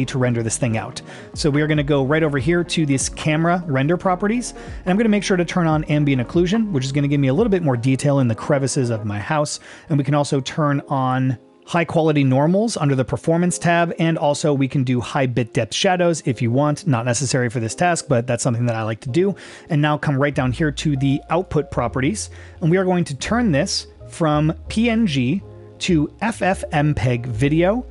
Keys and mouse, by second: 0.7 click, 6.3 click, 12.8 click, 15.7 click, 25.0-27.5 drag.